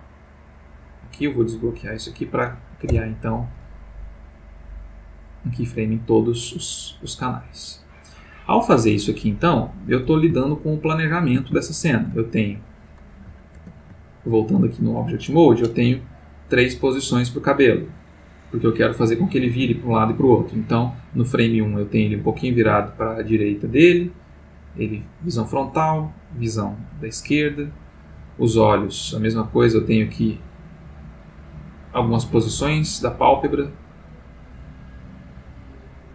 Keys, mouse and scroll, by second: 0.1 click, 0.6 click, 2.9 i, 4.3 click, 5.5-10.0 drag, 10.5 ctrl+middle click, 11.5 ctrl+shift+middle click, 13.6 ctrl+Tab, 14.4 ctrl+click, 15.0 click, 16.5-20.8 drag, 23.2-27.2 drag, 27.8 click, 29.2 click, 30.6 click, 31.8-34.7 drag, 35.0 click.